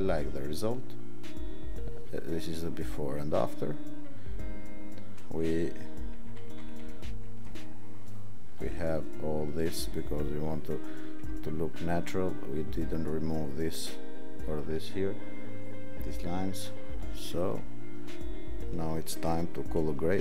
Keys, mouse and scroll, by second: 6.2 ctrl+=, 6.4 ctrl+=, 6.7 ctrl+=, 7.0 ctrl+=.